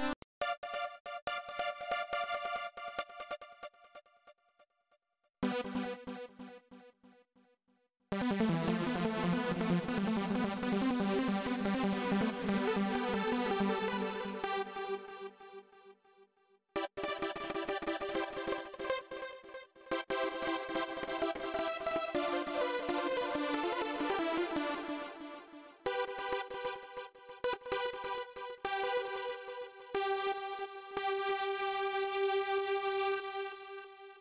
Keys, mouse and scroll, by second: 0.0 click, 2.8 space, 3.5 click, 5.2 m, 7.6-14.1 typing, 16.2-18.4 typing, 19.6-29.6 typing, 30.7 t, 34.1 space.